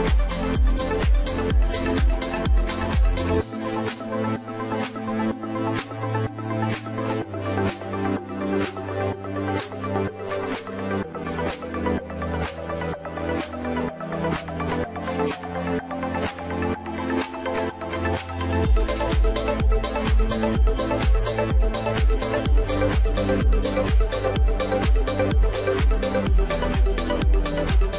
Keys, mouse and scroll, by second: 2.1-2.7 scroll up 2, 2.7-5.7 middle drag, 6.5-9.6 drag, 10.8-11.2 scroll down 3, 11.2-14.3 middle drag, 15.2 click, 15.7 click, 16.5 scroll up 2, 17.2-20.1 middle drag, 20.1-20.6 scroll down 1, 20.6-21.5 shift+middle drag, 21.5-22.9 scroll up 1, 22.9-24.7 middle drag, 24.7 click.